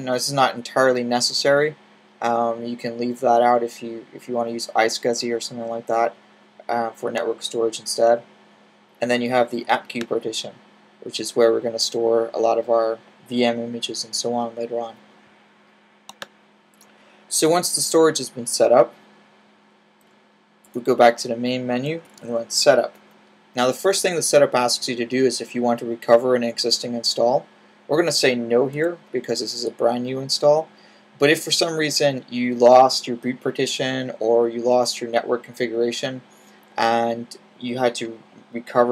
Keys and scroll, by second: 19.9 /, 21.9 typing, 28.6 n.